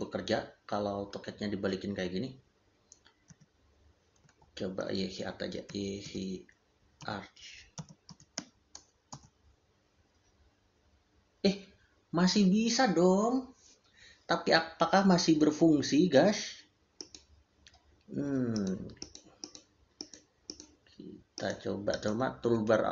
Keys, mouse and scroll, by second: 3.1 click, 3.2 d, 4.1 Escape, 8.2 h, 8.9 Return, 17.0 click.